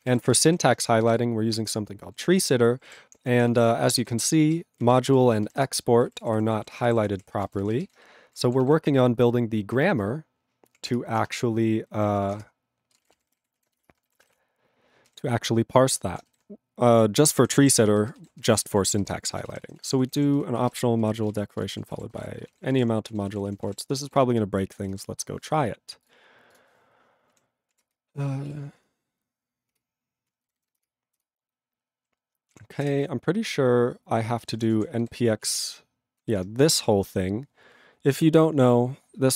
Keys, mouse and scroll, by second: 1.8 ctrl+Return, 2.2 ctrl+=, 2.8 ctrl+=, 3.1 ctrl+p, 3.3 ctrl+p, 3.5 ctrl+space, 3.5 ctrl+e, 3.7 ctrl+n, 3.8 ctrl+e, 3.8 ctrl+n, 4.0 ctrl+g, 5.8 ctrl+Return, 6.1 ctrl+=, 6.6 ctrl+=, 7.1 ctrl+p, 7.2 ctrl+p, 7.4 ctrl+space, 7.5 ctrl+e, 7.6 ctrl+n, 7.7 ctrl+n, 7.8 ctrl+g, 11.0 ctrl+Return, 12.4 ctrl+Return, 13.0 ctrl+space, 13.1 ctrl+n, 13.4 ctrl+g, 13.9 Return, 15.1 ctrl+g, 17.4 ctrl+g, 17.8 ctrl+s, 17.9 ctrl+space, 18.4 ctrl+alt+b, 18.7 ctrl+s, 19.0 ctrl+g, 19.3 ctrl+n, 19.3 ctrl+a, 19.4 ctrl+space, 19.6 ctrl+n, 19.6 ctrl+e, 19.7 ctrl+n, 19.9 ctrl+g, 20.1 ctrl+p, 20.4 ctrl+f, 20.6 ctrl+space, 20.7 ctrl+e, 20.7 ctrl+g, 21.0 ctrl+n, 21.1 ctrl+a, 21.2 ctrl+space, 21.3 ctrl+e, 21.3 ctrl+g, 21.8 ctrl+s, 21.9 ctrl+space, 21.9 ctrl+a, 22.0 ctrl+p, 22.1 ctrl+g, 22.2 ctrl+e, 22.3 ctrl+n, 22.4 ctrl+space, 22.5 ctrl+a, 22.7 ctrl+p, 22.7 ctrl+g, 22.8 ctrl+e, 22.8 ctrl+p, 23.1 ctrl+a, 23.2 ctrl+space, 23.3 ctrl+e, 23.4 ctrl+n, 23.5 ctrl+e, 23.6 ctrl+n, 23.7 ctrl+e, 23.7 ctrl+g, 24.1 ctrl+s.